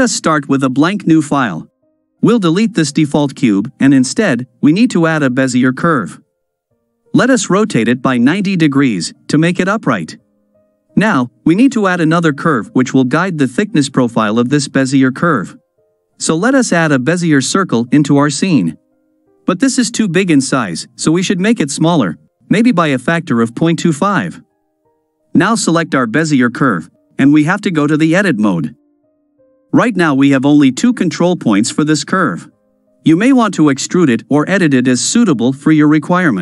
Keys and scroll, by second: 2.3 x, 6.5 r, 8.9 g, 10.3 KP_Decimal.